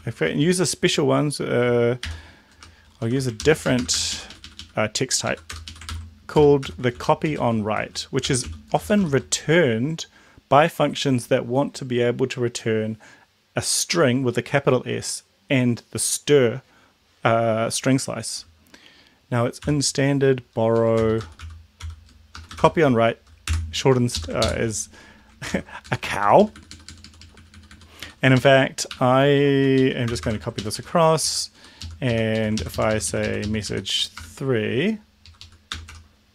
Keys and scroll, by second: 0.3 BackSpace, 2.1 u, 2.5 BackSpace, 3.1 shift+Home, 3.4 ctrl+x, 3.7 BackSpace, 4.1 Up, 4.3 Up, 4.4 Up, 4.6 Up, 5.4 Left, 5.5 Return, 5.6 Up, 5.9 ctrl+v, 6.4-8.9 typing, 19.7 b, 20.8 Down, 21.1 Return, 21.2-24.0 typing, 24.2 Left, 25.5 ctrl+c, 25.8 Down, 26.1 Down, 26.2 Down, 26.4 Down, 26.6 Down, 27.3 Down, 28.4 shift+Up, 28.9 shift+Home, 29.5 ctrl+c, 29.7 Right, 30.1 Return, 30.4 ctrl+v, 30.6 Up, 30.8 Up, 31.2 Down, 31.6 End, 31.8 Left, 32.1 Left, 32.3 Right, 34.2 BackSpace, 35.1 Left, 35.3 Left, 35.4 Left, 35.7-36.3 typing.